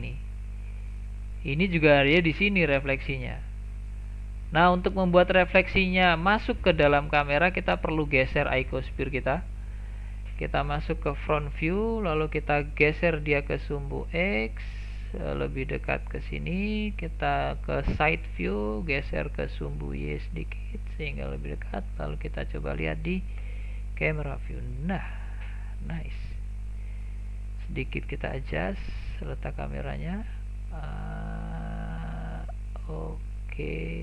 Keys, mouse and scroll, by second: 4.8 middle click, 5.7-6.6 scroll down 1, 6.6-7.1 scroll down 3, 7.1-8.5 middle drag, 8.5 click, 9.1 click, 10.0 click, 11.1 KP_1, 12.2-12.9 scroll up 1, 12.9 g, 17.2 KP_3, 18.8 g, 23.4 KP_0, 25.0-25.5 scroll up 1, 25.5-28.2 shift+middle drag, 28.2 click, 28.9-30.3 scroll down 1, 30.3-33.0 middle drag, 33.0-33.4 scroll up 1, 33.4-34.0 shift+middle drag.